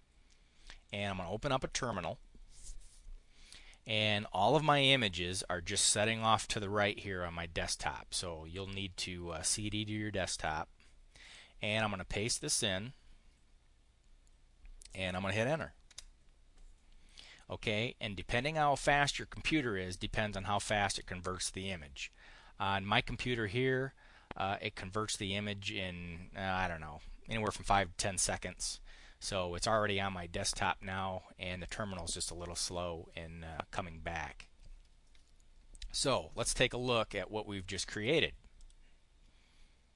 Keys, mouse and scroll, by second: 0.7 click, 11.0 click, 12.2 click, 15.8 Return, 38.4 click.